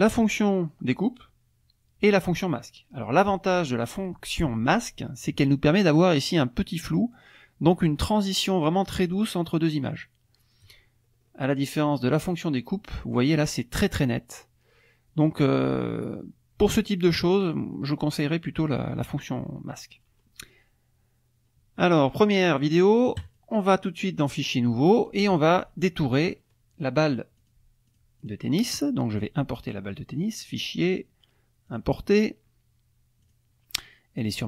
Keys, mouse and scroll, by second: 10.4 click, 10.9-12.8 scroll up 5, 17.4-19.0 scroll down 7, 21.3 scroll down 1, 23.2 click, 24.4 click, 27.4 click, 27.9 click, 28.2 click, 29.1 click, 30.4 click, 31.7 click, 33.2 click, 34.2 click.